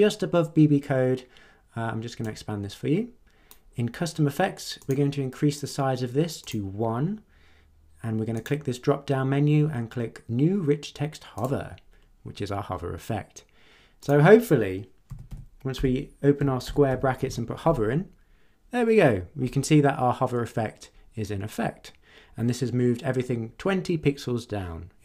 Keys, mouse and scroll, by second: 2.2-3.7 drag, 4.8 click, 6.4 click, 8.3 click, 11.3 click, 14.0 click, 15.0-17.7 typing, 15.7 Left.